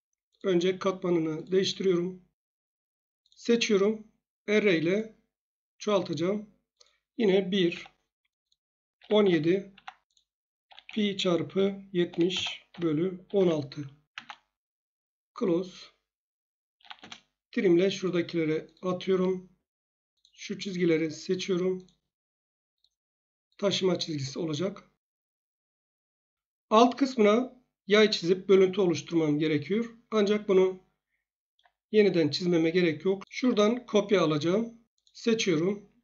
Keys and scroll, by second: 1.7 Escape, 7.7 1, 8.7-13.3 typing, 14.1 Tab, 16.5-17.2 typing, 19.1 Escape, 24.0 Escape.